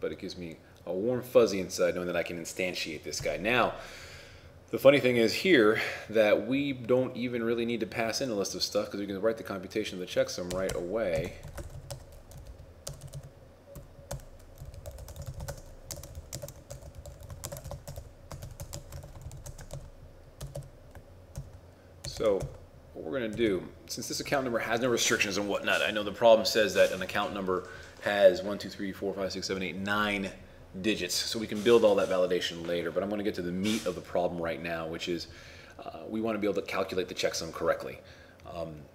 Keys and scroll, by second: 11.5 shift+t, 16.1 shift+c, 16.4 shift+c, 17.6 shift+c, 19.0-19.9 typing.